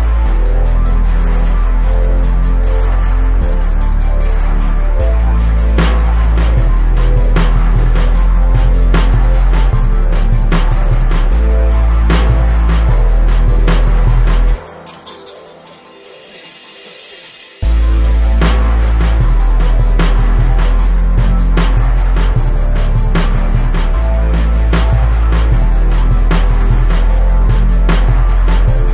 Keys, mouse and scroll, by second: 1.1-3.1 drag, 3.5 click, 4.8 right click, 5.6 g, 8.6 right click, 9.5 right click, 10.6 click, 11.9-13.4 drag, 13.4 right click, 13.6 right click, 14.4 right click, 14.8 middle click, 15.3 click, 17.0 right click, 17.7-18.9 drag, 21.3-25.7 drag, 25.9 right click, 26.6-27.8 drag, 28.6-28.9 right drag.